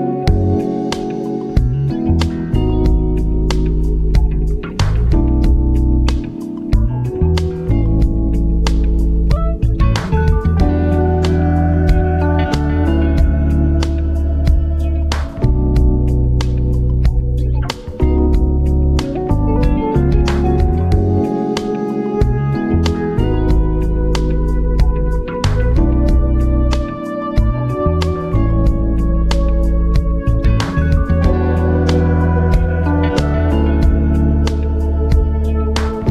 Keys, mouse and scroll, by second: 6.4 ctrl+alt+scroll down 1, 7.2 click, 8.6 b, 9.2 ctrl+alt+scroll up 1, 9.7-11.1 alt+right drag, 11.1 ctrl+alt+scroll up 1, 11.4-12.8 alt+right drag, 12.8-17.7 drag, 17.7 scroll down 1, 18.7 click, 19.1 scroll down 1, 20.4-30.4 drag, 33.9 ctrl+scroll down 1, 34.9 ctrl+scroll up 1.